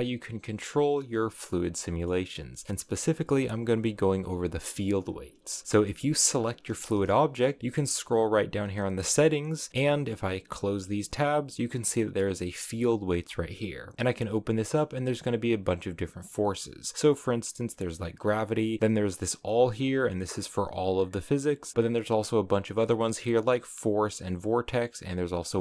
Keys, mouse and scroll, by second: 1.8-4.7 middle drag, 5.4 space, 5.6-7.6 middle drag, 7.6-10.4 drag, 10.5-13.1 drag, 13.1-13.9 scroll down 14, 19.2-22.0 drag.